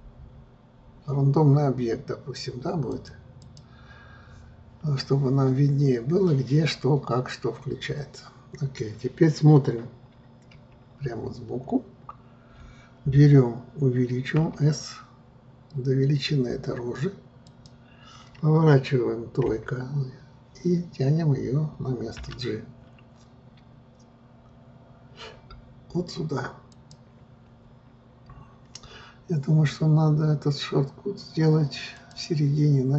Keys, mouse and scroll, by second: 11.8 scroll, 14.5 s, 20.9-22.3 scroll, 22.3 g, 32.1-32.9 drag.